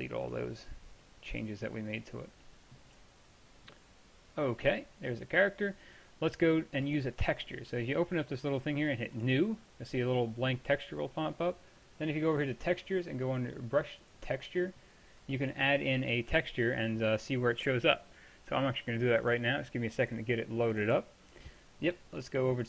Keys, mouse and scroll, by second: 2.4-3.7 middle drag, 4.0-5.0 middle drag, 5.0-5.4 scroll up 1, 5.4-6.1 middle drag, 6.9-10.8 drag, 11.0-12.4 middle drag, 16.3-22.6 middle drag.